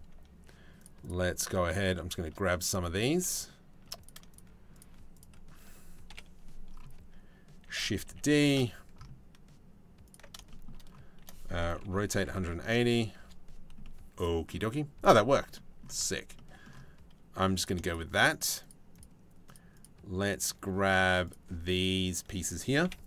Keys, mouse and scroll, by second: 0.6 shift+right click, 1.3 shift+click, 2.5 click, 2.9 shift+click, 3.9 shift+click, 4.3 shift+click, 4.7 shift+click, 5.7 KP_7, 7.2 shift+d, 10.1 shift+middle click, 11.4 r, 13.4 middle click, 15.1 middle click, 15.6 middle click, 15.9-17.3 middle drag, 17.4 shift+middle click, 17.9 shift+right click, 18.2 shift+right click, 18.5 shift+right click, 19.1 shift+right click, 19.9 shift+right click, 20.8 shift+right click, 21.3 shift+right click, 22.4 KP_7.